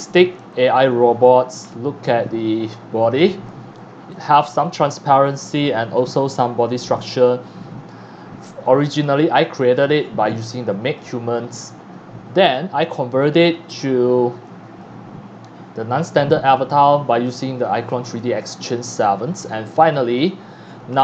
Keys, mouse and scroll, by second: 0.4 x, 0.5 click, 0.9 c, 1.7-2.1 scroll up 2, 2.3 scroll down 1, 2.6 x, 2.7 click, 3.5 click, 4.1 click, 4.2 c, 4.7 click, 4.8 x, 5.6 click, 6.0 c, 6.2 click, 6.9 x, 7.0 click, 8.7 click, 9.4 scroll up 1, 9.7-10.3 scroll down 3, 11.0 middle click, 14.5 click, 18.9 click, 19.8 click, 20.9 scroll down 1.